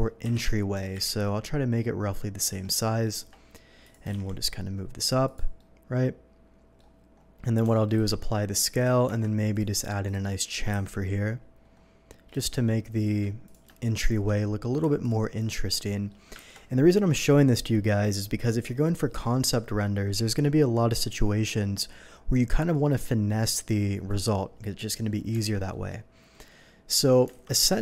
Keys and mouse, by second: 0.2 KP_3, 0.7 g, 0.9 y, 2.2-9.1 drag, 2.5 Escape, 3.1 Tab, 4.0 g, 4.1 z, 7.7 Tab, 8.1 ctrl+a, 9.1 Tab, 10.7 ctrl+b, 14.5-27.8 shift+drag, 19.1 ctrl+b, 25.3 Tab, 27.3 alt+a.